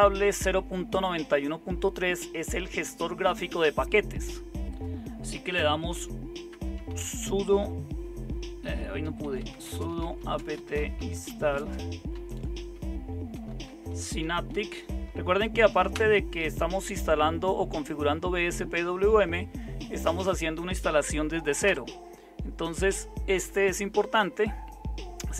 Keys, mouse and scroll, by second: 5.9-15.9 typing, 21.6 Return.